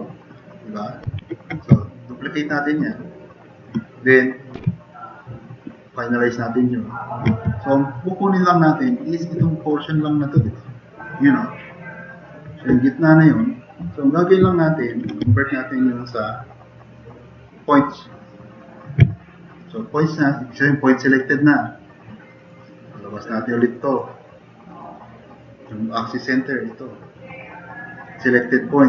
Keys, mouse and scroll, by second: 1.3 ctrl+z, 4.6 ctrl+shift+e, 7.7-8.4 drag, 8.8-9.2 drag, 9.9 click, 10.1 click, 10.5-12.2 drag, 14.5 click.